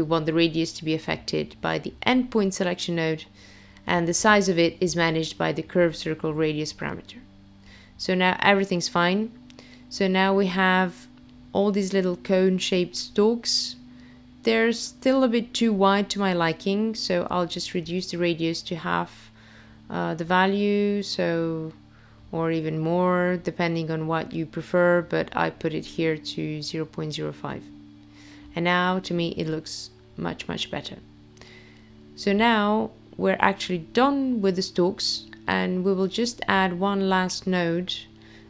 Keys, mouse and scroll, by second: 3.8 click, 4.7 click, 8.0 middle click, 10.4-11.2 scroll up 2, 11.2-11.7 scroll down 1, 12.9 middle click, 15.7 click, 23.4-24.3 scroll down 1, 24.3 middle click, 35.2 middle click, 37.5 click.